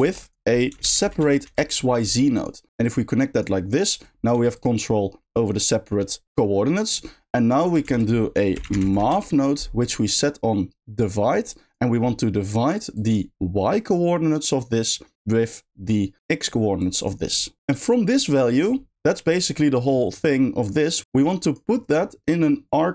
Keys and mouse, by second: 0.0 shift+a, 2.8 click, 3.1 click, 4.1 click, 4.3 g, 6.9 click, 7.8 shift+a, 10.1-11.1 drag, 11.7 drag, 12.9-14.4 drag, 15.3-16.5 drag, 16.8 click, 17.0 click, 17.3 click, 17.6 g, 17.7 click, 21.2 click.